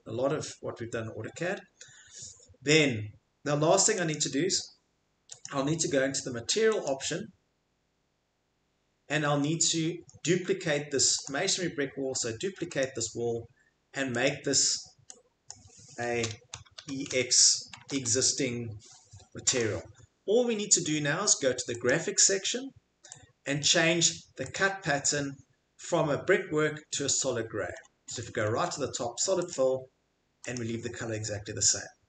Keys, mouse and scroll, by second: 4.1 click, 11.2 right click, 12.8 click, 16.8 e, 17.1 x, 17.8 BackSpace, 17.9 x, 19.6 click, 21.9 click, 24.6 click, 26.4-26.9 middle click, 26.8 middle click, 27.4-29.5 scroll, 29.5 click, 30.5 click.